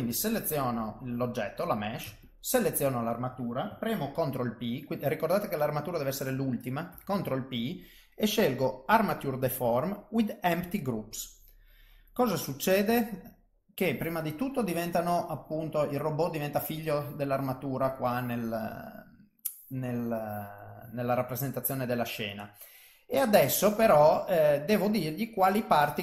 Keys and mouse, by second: 0.1 click, 2.2 shift+click, 6.9 ctrl+p, 14.9 click, 16.7 click, 18.8 middle click, 20.6 click, 21.1 middle click, 23.3 click, 24.5 middle click.